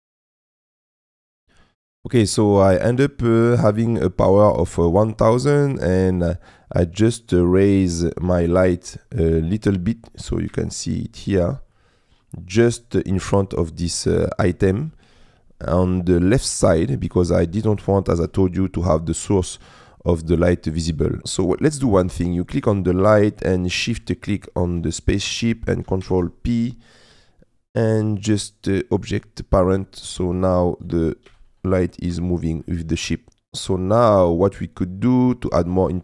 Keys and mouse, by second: 0.0-0.9 typing, 0.2 click, 0.4 click, 0.6 click, 2.2-3.2 middle drag, 5.5-7.2 middle drag, 7.9 middle click, 8.6 shift+middle click, 9.3 middle click, 10.4 KP_Decimal, 11.2 middle click, 12.0 click, 12.4 middle click, 13.8 middle click, 14.5 middle click, 14.6 click, 15.6 middle click, 17.5 click, 21.1 middle click, 22.4 middle click, 23.1 click, 26.0 ctrl+p, 30.0 click, 30.8 click, 31.2 g, 32.1 Escape, 33.7 middle click, 35.6 middle click.